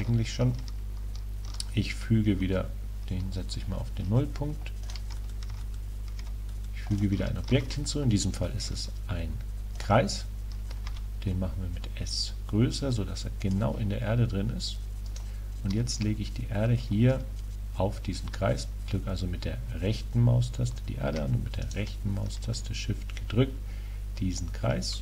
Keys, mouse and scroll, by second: 3.3-6.0 middle drag, 4.9-6.7 drag, 7.6 shift+a, 10.9 s, 13.6-19.4 drag, 15.2 right click, 21.7-23.2 right drag, 23.2-23.8 drag.